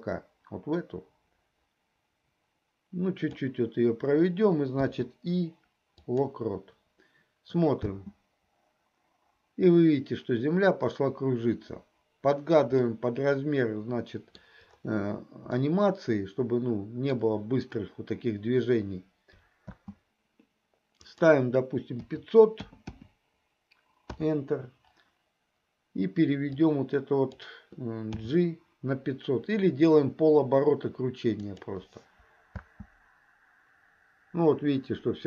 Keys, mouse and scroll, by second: 4.7 i, 8.2 space, 13.0-14.6 middle drag, 16.1-17.5 middle drag, 19.9 space, 21.1-24.6 drag, 22.8 KP_0, 26.7-27.3 drag, 28.2 g, 33.2 space.